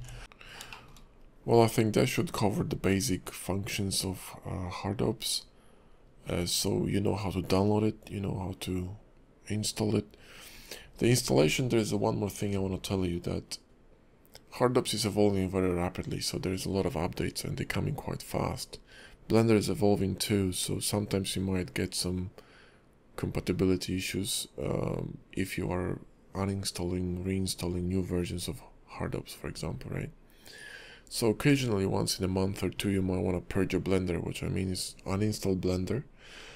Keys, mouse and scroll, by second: 0.4 shift+middle click, 0.4 scroll up 4, 0.7 shift+middle click, 5.3-6.0 scroll down 2, 6.0-8.5 scroll up 1.